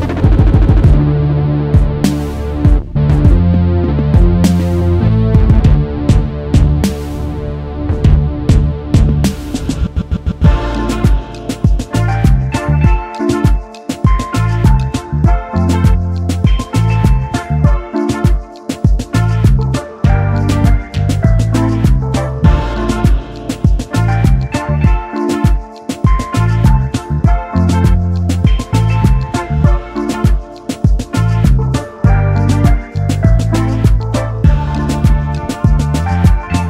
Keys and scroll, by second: 9.0 space, 9.1 space, 35.2-36.6 typing.